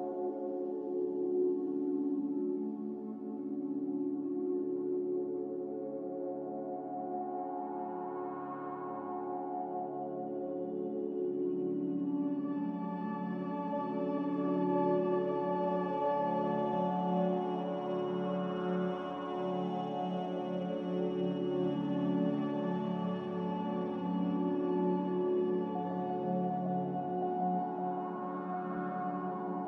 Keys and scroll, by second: 1.0 a, 10.9 z, 12.5-13.3 typing, 16.4 a, 16.7 x, 20.3-21.1 typing, 23.9 z, 25.4-27.7 typing.